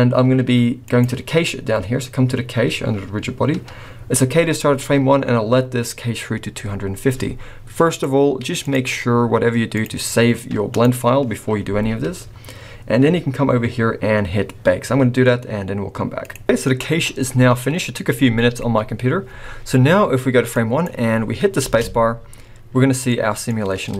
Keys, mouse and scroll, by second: 0.8 click, 2.9-3.8 scroll down 3, 7.9 click, 16.2 click, 20.5 click, 21.1 scroll down 3, 21.6 space, 23.1 middle click.